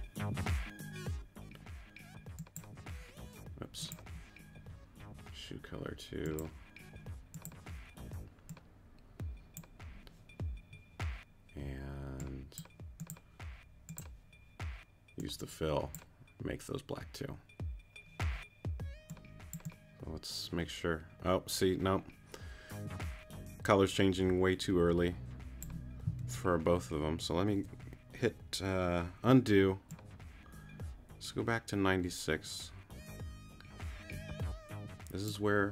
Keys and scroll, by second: 26.2 super+z, 27.5 super+z.